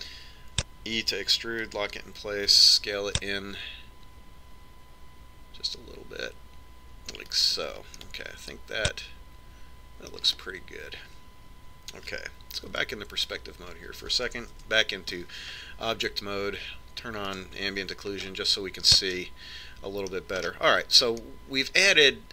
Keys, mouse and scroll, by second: 2.5 e, 4.0 s, 9.5-11.3 middle drag, 11.7-13.7 middle drag, 14.2 KP_5, 14.7-16.3 middle drag, 16.1 Tab, 18.8 click, 20.7-22.3 middle drag.